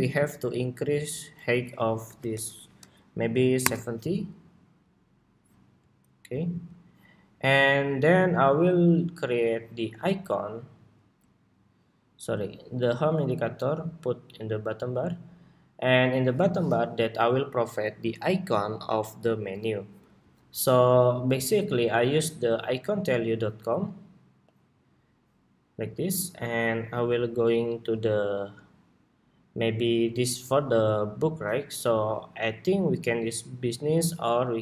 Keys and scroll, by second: 9.1 super+s.